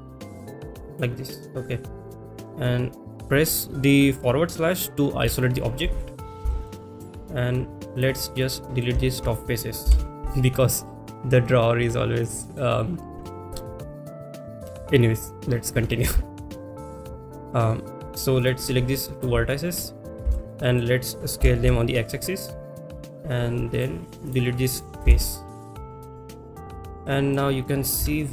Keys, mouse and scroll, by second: 0.9 click, 5.2 KP_Divide, 6.0 middle click, 6.5 shift+middle click, 7.9 click, 8.4 click, 8.6 middle click, 10.9 Delete, 11.8-12.5 middle drag, 13.2-13.6 shift+middle drag, 18.4 click, 19.7 shift+click, 20.3 shift+middle click, 20.6 middle click, 22.7 click, 22.7 s, 22.7 x, 23.7 click, 24.3 click, 26.4 Delete, 26.4 click, 27.0 middle click.